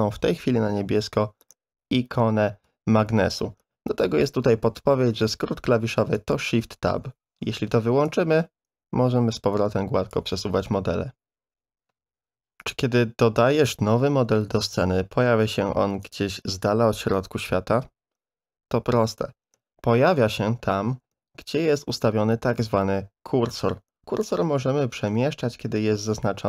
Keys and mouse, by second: 6.1 click, 8.0-10.1 drag, 14.5 shift+a, 21.1 Delete.